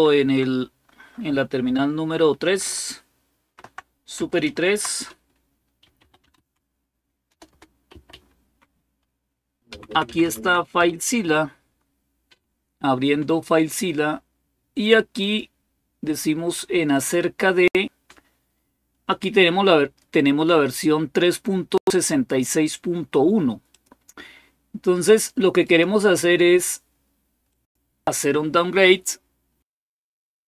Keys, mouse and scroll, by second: 3.2 super+3, 4.3 alt+super+d, 5.4-8.4 typing, 9.5 Down, 9.7 Down, 9.9 Down, 10.0 Down, 10.2 Down, 10.6 Return, 15.0 click, 16.7 click, 17.0 click, 23.5 click, 25.4 click, 27.2 click.